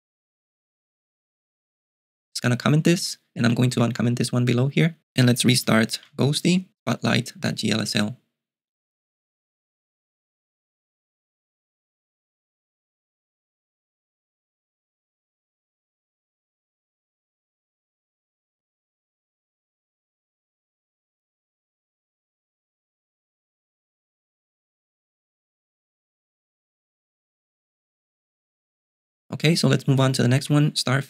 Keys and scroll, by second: 2.8-4.2 typing, 6.2 super+q, 30.0 ., 30.4 j.